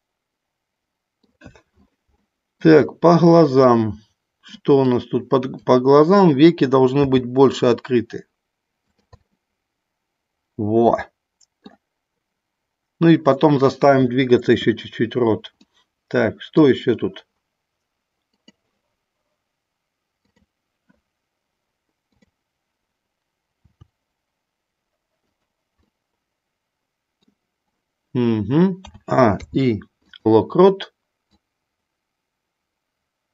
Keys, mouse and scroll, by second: 2.2 shift+middle click, 3.7 middle click, 4.8 click, 6.8 r, 8.8 click, 9.2-11.7 middle drag, 15.6 middle click, 20.2-21.3 drag, 22.1 click, 23.4 r, 25.8-27.1 middle drag, 28.8 a, 29.2 i, 31.2-33.3 drag.